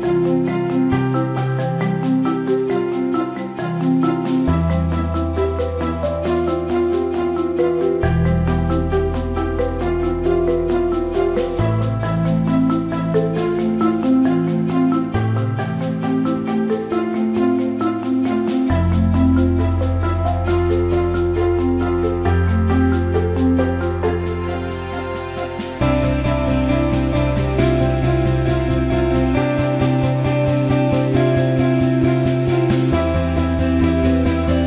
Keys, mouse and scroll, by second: 0.2-1.7 drag, 11.5-13.0 drag, 13.8 shift+click, 14.8 ctrl+z, 15.8 click, 16.5-18.3 drag, 18.5 alt+shift+middle click, 28.8 click, 29.9 Tab, 31.2-34.6 drag.